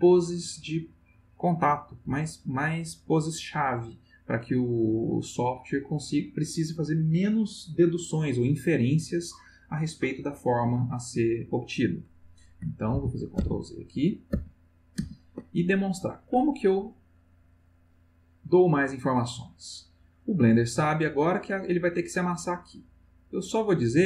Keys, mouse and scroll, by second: 12.9 ctrl+z, 14.3 ctrl+z, 17.8-20.8 drag, 23.5-24.0 drag.